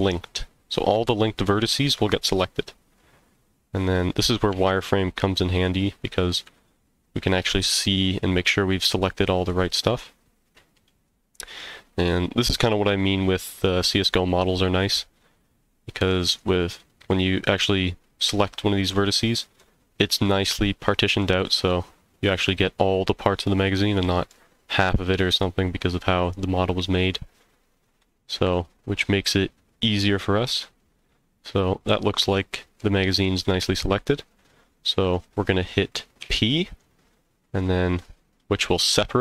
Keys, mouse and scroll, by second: 2.2-4.2 middle drag, 4.3 scroll up 1, 4.5 z, 7.1-11.6 middle drag, 12.1 middle click, 13.3-13.6 scroll down 1, 13.6-16.1 middle drag, 19.2 middle click, 20.5 middle click, 24.0 middle click, 26.7-30.8 middle drag, 30.8 middle click, 32.8-33.1 scroll up 1, 33.7-34.0 scroll down 1, 36.2 p.